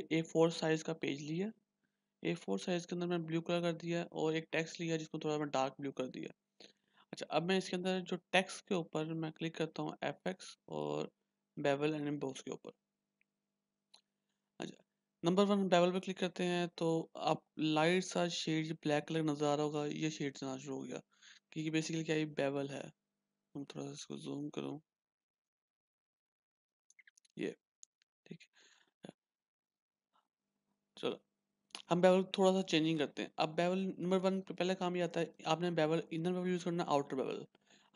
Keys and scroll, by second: 24.4-26.6 ctrl+=, 25.7 x.